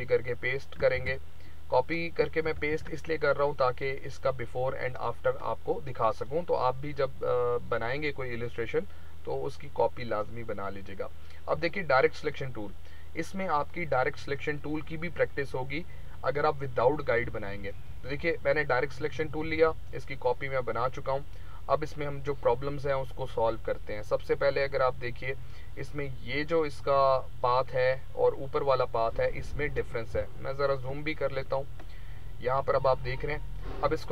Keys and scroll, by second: 0.9 ctrl+z, 2.4 ctrl+c, 2.7 ctrl+v, 30.1 z.